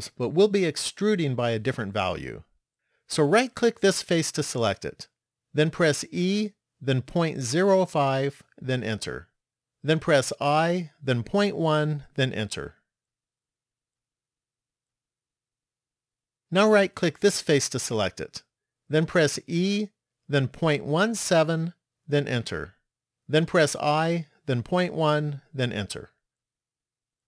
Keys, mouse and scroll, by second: 4.2 right click, 6.0 e, 10.8 i, 14.7 middle click, 17.7 right click, 19.7 e, 23.5 i.